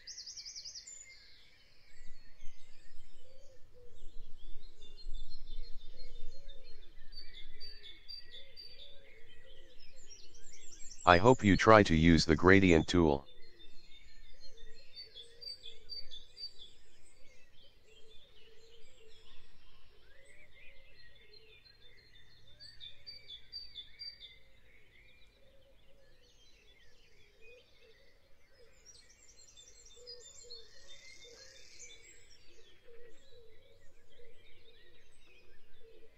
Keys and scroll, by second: 17.7 i, 20.2 i, 20.8 v, 24.1 Delete, 27.8 Delete, 31.6 a, 33.8 v.